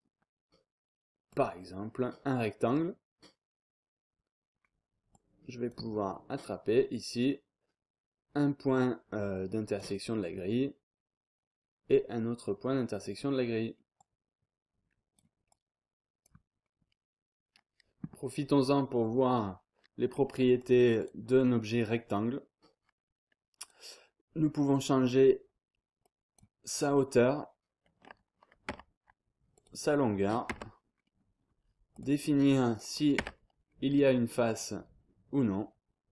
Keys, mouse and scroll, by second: 1.3 click, 4.6 scroll down 1, 4.8 scroll up 1, 5.1 click, 9.6 click, 13.0 click, 13.6-14.0 scroll down 2, 14.0-16.6 drag, 16.6 scroll down 2, 16.8-17.6 scroll up 2, 18.3-18.7 scroll up 2, 18.7 scroll down 1, 18.9-19.6 scroll up 1, 20.0-20.6 scroll down 1, 20.6 click, 21.8-22.4 scroll up 1, 23.6 click, 26.0 click, 27.5-29.0 scroll up 1, 28.7 Tab, 29.5 click, 29.8-30.7 scroll up 1, 30.5 Tab, 30.9 scroll down 2, 31.2-31.7 scroll up 2, 31.9 click, 32.7 click, 33.2 Tab, 33.6 scroll down 1, 33.9-34.5 scroll up 1, 34.6-36.1 drag.